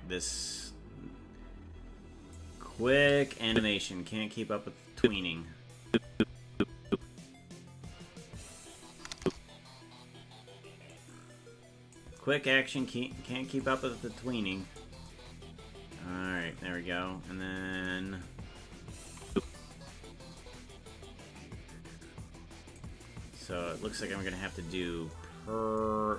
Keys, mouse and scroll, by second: 0.6-2.4 drag, 3.5 Left, 5.9-10.0 Right, 10.9-11.9 drag, 13.6-14.8 drag, 17.1-17.8 scroll up 12, 19.3 Left, 21.1-22.8 drag, 24.1-24.6 scroll up 4, 24.9 scroll up 3.